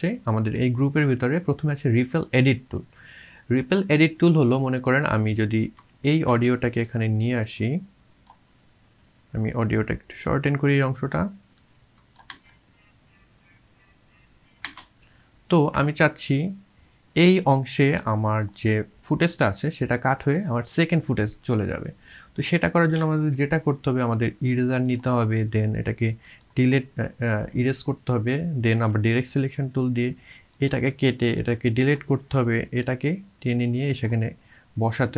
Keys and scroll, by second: 6.3 v, 12.4 space, 28.8 v, 31.8 Delete.